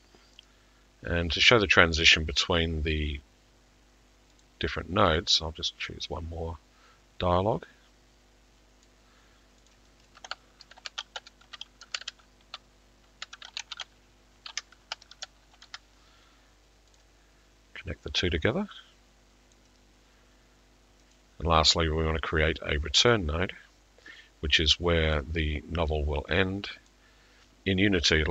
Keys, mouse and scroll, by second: 0.5 click, 4.4 middle click, 8.8 click, 10.1 click, 10.7 t, 14.5 typing, 17.0 click, 17.0 typing, 19.5 click, 21.7 click, 23.2-23.8 scroll, 24.6 scroll, 25.1 click, 26.9 click.